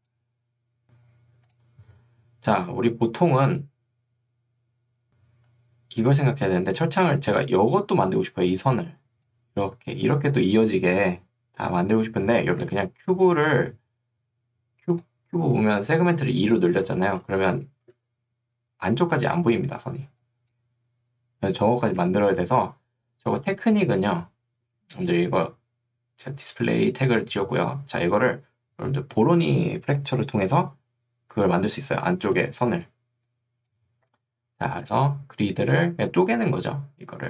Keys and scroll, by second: 5.1 3, 7.3 ctrl+2, 12.7 Escape, 15.7 ctrl+2, 16.9 Escape, 17.9 ctrl+2, 21.9 Escape, 32.1 ctrl+2, 34.1 Escape.